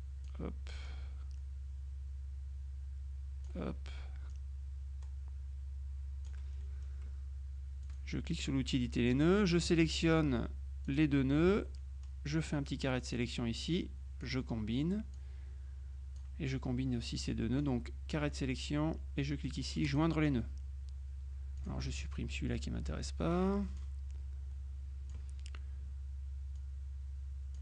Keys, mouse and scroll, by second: 4.4-6.9 drag, 7.9 click, 10.9 shift+click, 11.9-13.7 drag, 14.3 click, 15.2-16.7 drag, 17.7 click, 19.9 click, 21.7 click, 23.0 Delete, 23.9-25.7 drag, 26.7-27.6 drag.